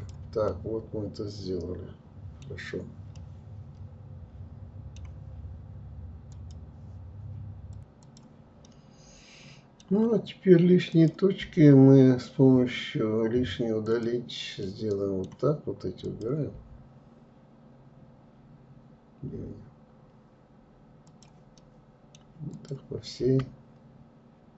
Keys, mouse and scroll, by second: 1.7 scroll down 2, 2.4-5.3 middle drag, 7.6-9.9 middle drag, 9.9 click, 10.4 Delete, 13.6-15.0 middle drag, 15.0 click, 20.5 middle click, 21.5 click.